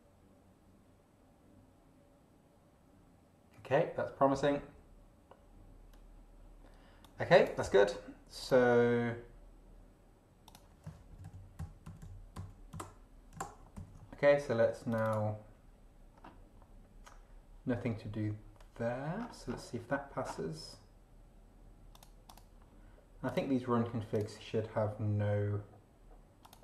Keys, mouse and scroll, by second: 7.0 click, 8.4 click, 10.5 click, 11.1 ctrl+shift+Left, 11.9 ctrl+shift+Right, 12.0 ctrl+shift+Left, 12.4 ctrl+shift+Right, 13.4 ctrl+shift+Left, 13.8 ctrl+shift+c, 14.9 click, 16.1-16.4 scroll down 1, 18.0 scroll down 2, 19.2-19.7 scroll down 2, 20.2 scroll down 2, 21.9 click, 22.5 click, 23.2 click, 24.1 click, 26.4 click.